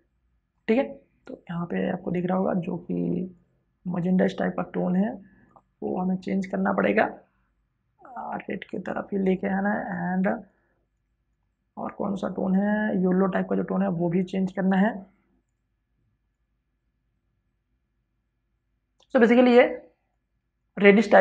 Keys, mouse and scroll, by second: 19.0 space, 19.1 ctrl+click.